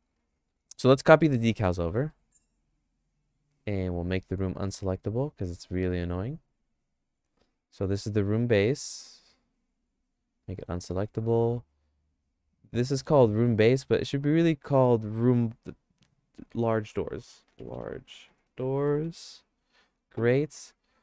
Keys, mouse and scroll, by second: 1.0 shift+middle click, 2.1 middle click, 2.7 click, 8.4 click, 9.8 right click, 10.4 right click, 12.9 click, 13.2-16.1 drag, 16.1-18.2 right drag, 18.2 shift+click, 18.4-20.1 right drag, 18.8 o.